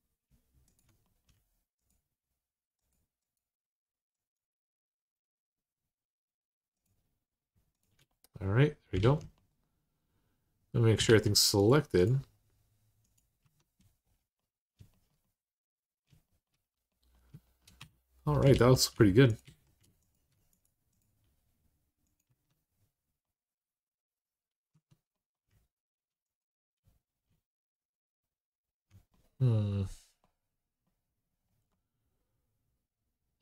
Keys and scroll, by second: 8.8 alt+z, 10.8 alt+z, 13.2 Tab, 17.6 Tab, 18.3 alt+z, 19.2 alt+z, 22.1 Tab, 24.5 Tab.